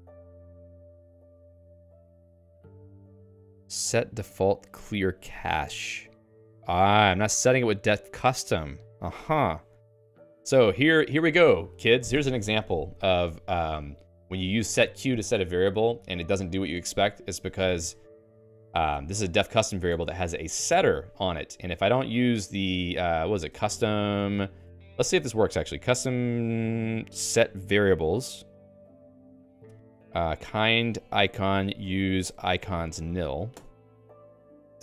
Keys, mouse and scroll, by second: 0.6 j, 1.8 k, 5.1 h, 11.2 k, 18.4 j, 18.9 j, 19.9 Escape, 20.4 k, 20.8 shift+v, 23.1-25.3 typing, 26.2 ctrl+j, 26.8 ctrl+j, 28.8 Return, 29.6 ', 33.6 Return.